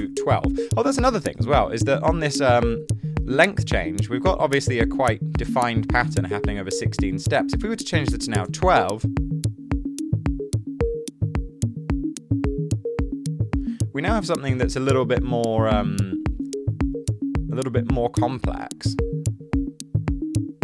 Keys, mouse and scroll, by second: 0.0-0.3 typing, 7.4-8.5 typing.